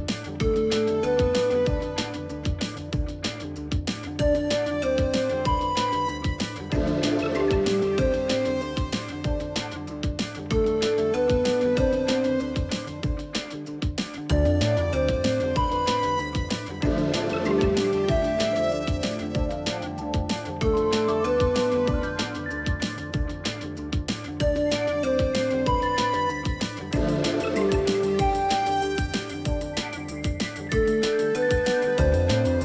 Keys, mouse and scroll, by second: 0.0 Up, 0.7 Down, 1.5 alt+scroll down 1, 1.6 space, 5.2 Up, 7.8 ctrl+shift+], 8.9 Up, 10.5 alt+scroll down 1, 10.8 space, 14.2 double click, 16.6 space, 16.9 double click, 17.0 space, 20.1 double click, 23.7 space, 24.6 double click, 25.6 space, 26.0 double click, 28.9 i.